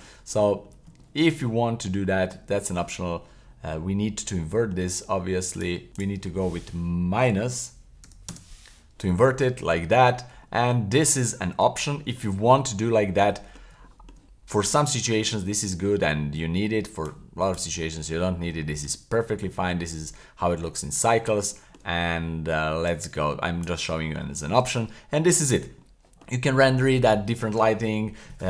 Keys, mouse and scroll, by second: 0.6-1.0 scroll up 2, 1.0 shift+middle drag, 1.5-1.8 middle drag, 1.9 scroll up 2, 4.4 shift+middle click, 5.5 click, 5.9-8.3 drag, 9.6-10.0 scroll down 2, 10.4-10.9 middle drag, 10.9 scroll down 2, 11.3-11.9 middle drag, 12.2 middle drag, 13.5 scroll down 2, 13.9 shift+middle drag, 14.6 shift+middle click, 15.0 scroll down 2, 15.3 shift+middle click, 15.7 scroll down 1, 17.1-18.1 drag, 18.3 scroll down 1, 18.6 shift+middle click, 19.0-19.3 scroll up 1, 19.4-19.7 middle drag, 19.9-20.4 scroll down 1, 20.4 middle drag, 21.2 scroll up 1, 21.5 shift+middle drag, 22.9 click, 23.9-24.3 middle drag, 24.3-24.7 shift+middle drag, 24.7-25.1 scroll up 2, 25.1-25.8 scroll down 2, 25.8-26.2 middle drag, 26.5-26.9 middle drag.